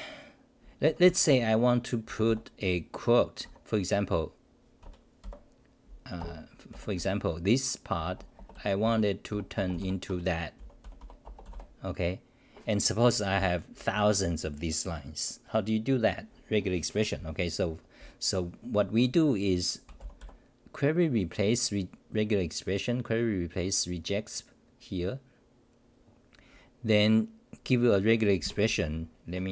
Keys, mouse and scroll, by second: 0.8 Home, 1.0 r, 2.1 y, 3.4 Home, 4.8 Home, 5.2 6, 6.2 ctrl+g, 6.7 6, 6.9 j, 8.0 Return, 8.3-11.5 typing, 10.1 Home, 13.3-13.7 c, 18.0 c.